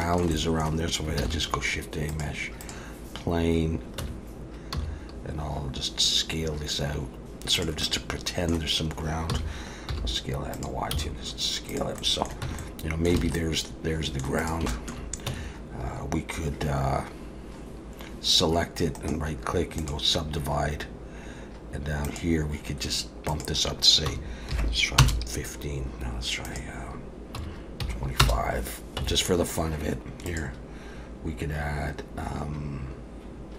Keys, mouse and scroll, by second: 0.0 middle click, 0.3 middle click, 1.2 shift+a, 4.0 Tab, 4.7 s, 7.8 middle click, 9.3 s, 10.9 s, 12.0 middle click, 12.4 Tab, 12.6 middle click, 13.2 alt+a, 13.4 middle click, 14.4 click, 14.7 shift+middle click, 15.3 Tab, 19.0 right click, 22.1 click, 23.3 click, 26.5 click, 29.0 Tab, 30.3 click.